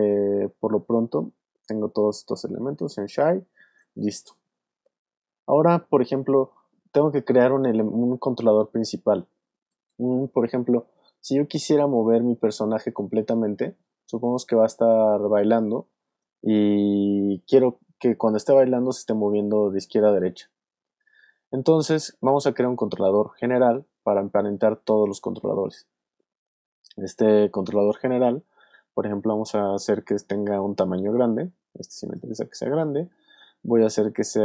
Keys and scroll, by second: 18.6 super+z, 20.0 super+z.